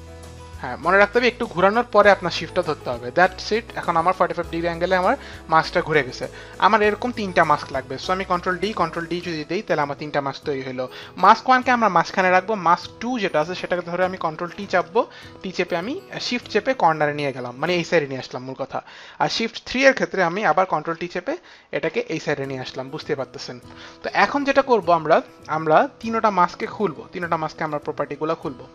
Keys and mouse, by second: 8.6 ctrl+d, 9.0 ctrl+d, 11.2 ctrl+d, 11.2 click, 12.9 ctrl+d, 12.9 click, 14.4 ctrl+t, 15.5 ctrl+t, 15.5 click, 20.5 ctrl+t, 21.9 click, 26.5 click.